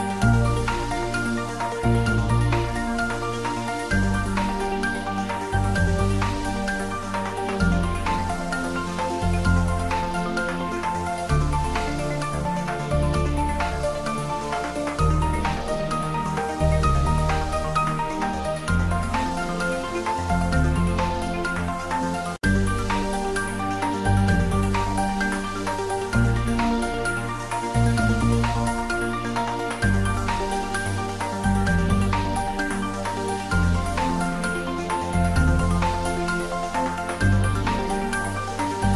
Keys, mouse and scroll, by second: 7.4 click, 9.2 click, 10.6 click, 14.7 `, 14.9 3, 16.9 scroll down 1, 17.1 Tab, 20.3 s, 21.6 click, 22.1 Tab, 25.6 scroll down 1, 26.5 click, 27.9 click, 29.2 click, 33.8 click, 35.2 scroll down 1, 35.7 middle click, 36.8 click.